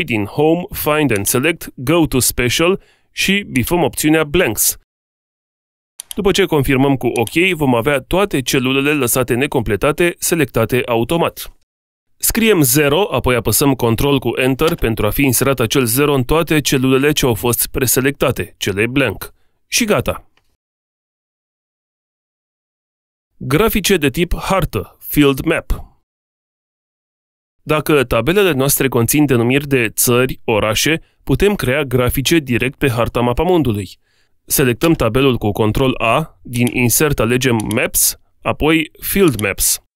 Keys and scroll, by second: 13.7 ctrl+Return, 35.0 ctrl+a.